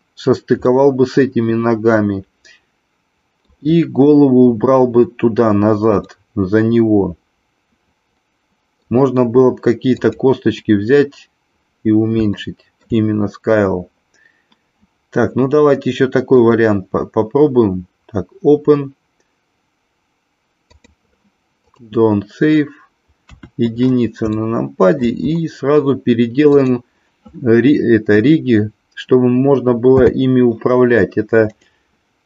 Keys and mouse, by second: 0.6-3.4 middle drag, 6.1-8.9 middle drag, 9.9 click, 12.3 shift+middle click, 16.3-22.5 drag, 23.3 KP_1, 24.3-25.1 shift+middle drag, 26.5 click, 29.9 n, 31.4 click.